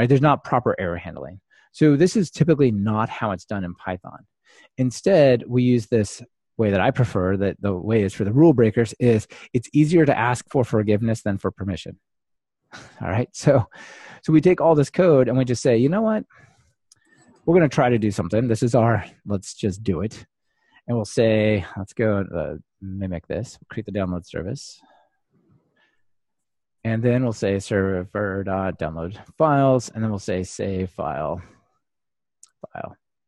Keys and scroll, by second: 24.3 super+c, 26.1 super+v, 29.3 super+v, 30.2 Return.